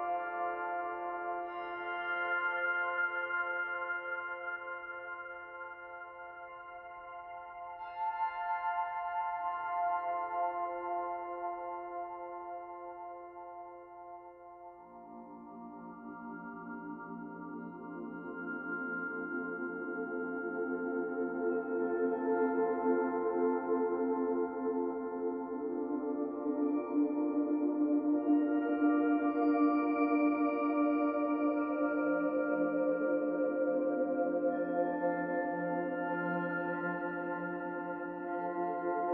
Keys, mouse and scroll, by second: 0.3 scroll down 1, 0.3-2.2 scroll down 2, 2.2 click, 8.5 middle click, 11.1 click, 12.6 click, 15.8 click, 20.0 middle click, 22.5 click, 24.0 click, 29.6 click, 38.5 click.